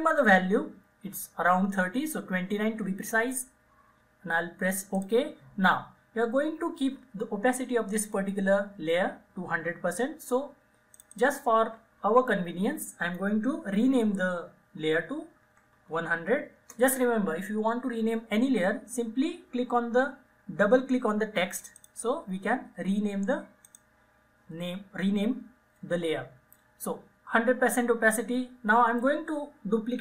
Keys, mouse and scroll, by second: 11.0 click, 15.2-16.5 typing, 16.6 Return, 21.7 click.